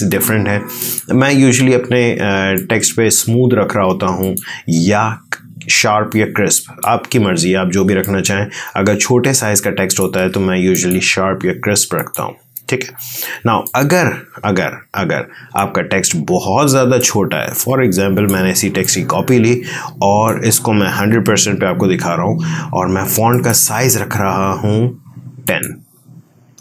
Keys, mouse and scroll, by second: 6.5 click, 7.7 space, 7.9-10.6 ctrl+drag, 13.3 ctrl+space, 13.5-16.9 ctrl+drag, 16.9-18.5 ctrl+alt+drag, 18.5 ctrl+space, 18.7 ctrl+click, 19.0 ctrl+space, 21.0 ctrl+1, 23.2 click.